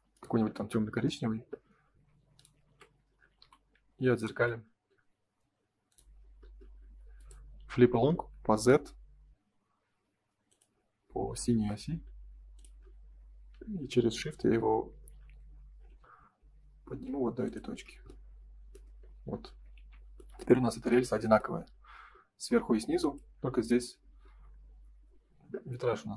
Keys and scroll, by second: 1.4 space, 1.6 Escape, 3.4 m, 6.7 space, 18.9 space, 19.7 ctrl+s, 24.4 F3.